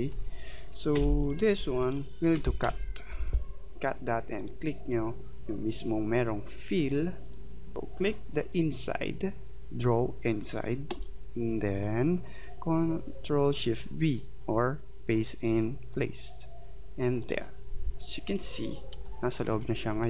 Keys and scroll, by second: 1.0 v, 2.6 ctrl+x, 18.9 space.